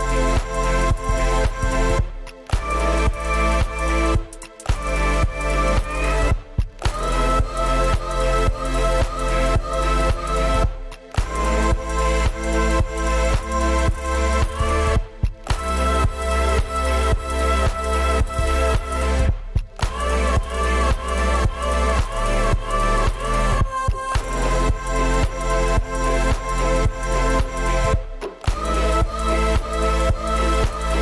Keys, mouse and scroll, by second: 0.4 double click, 0.6 double click, 1.0 double click, 1.6 middle click, 2.8 middle click, 3.4-3.8 scroll down 4, 4.8 ctrl+click, 5.1 ctrl+click, 5.3 ctrl+scroll down 3, 5.5 ctrl+click, 5.6 ctrl+scroll up 4, 6.0 ctrl+click, 6.0 shift+middle click, 6.4 ctrl+click, 6.9 middle click, 8.5 middle click, 8.6 scroll up 4, 9.1 middle click, 9.3 middle click, 9.6 middle click, 9.9 ctrl+click, 10.1 shift+middle click, 11.3 shift+middle click, 11.5 scroll down 5, 11.6 Escape, 12.1 double click, 12.2 double click, 12.3 scroll up 2, 12.3 m, 13.1-13.7 scroll down 9, 13.1 space, 13.2 Escape, 13.3 Escape, 13.4 middle click, 13.7 Escape, 14.7 middle click, 15.2 scroll up 6, 15.3 shift+middle click, 16.6 middle click, 17.5-18.6 scroll up 21, 19.9 middle click, 20.0 ctrl+z, 20.1-20.6 scroll down 22, 20.7 double click, 20.8 double click, 21.0 scroll up 4, 21.2 double click, 21.3 double click, 21.6 right click, 21.9-24.5 typing, 24.8 scroll down 6, 24.9 shift+middle click, 25.2 scroll up 4, 25.6 double click, 25.7 right click, 26.0-28.9 typing, 29.0 double click, 29.3 middle click, 30.1-31.0 scroll up 16.